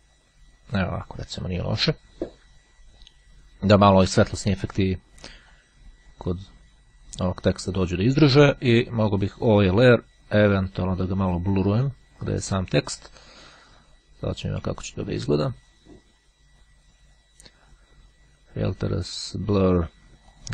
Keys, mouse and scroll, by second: 5.6-6.7 drag, 9.6 click, 10.7 click, 17.7 click, 20.4 click.